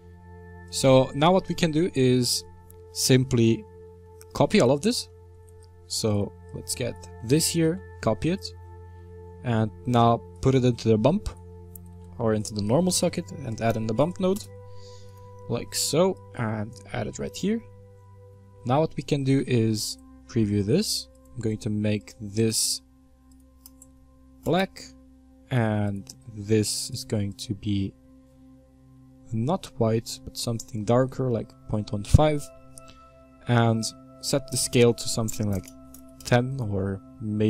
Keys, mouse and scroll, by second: 0.8 click, 1.5-3.0 middle drag, 3.0-3.9 scroll down 15, 7.6 shift+d, 11.3 click, 12.0 shift+a, 16.7 click, 17.4 middle click, 17.8-18.7 scroll up 10, 18.7-19.8 shift+middle drag, 19.8 ctrl+shift+click, 21.1 click, 21.4 click, 22.0 click, 23.8 click, 25.8-26.1 drag, 28.1 click, 35.9-37.4 drag.